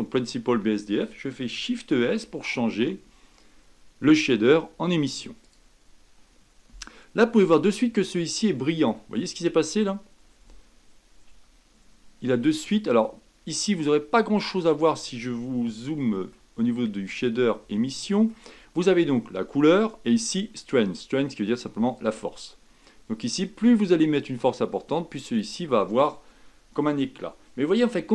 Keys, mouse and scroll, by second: 6.7-7.1 scroll up 4, 7.7-11.3 middle drag, 11.3 a, 22.1-25.0 drag.